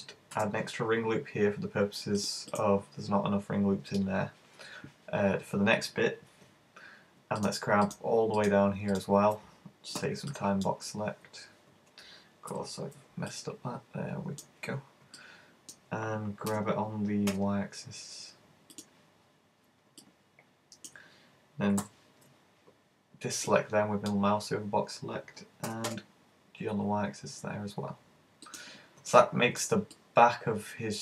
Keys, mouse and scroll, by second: 0.4 ctrl+r, 2.6 click, 7.5 shift+right click, 7.9 shift+right click, 8.5 shift+right click, 9.0 shift+right click, 10.0 b, 12.6 super+b, 15.2 middle click, 16.5 g, 18.8 click, 20.0 middle click, 21.8 b, 25.7 g, 28.6 click, 29.2 right click, 30.0 middle click.